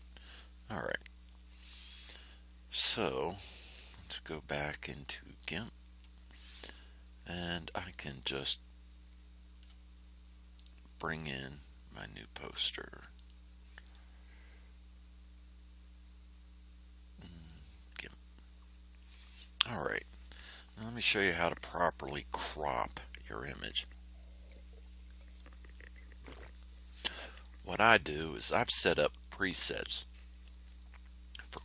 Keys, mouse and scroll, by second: 5.3 click, 10.5 click, 13.1 click, 13.8 right click, 17.4 click.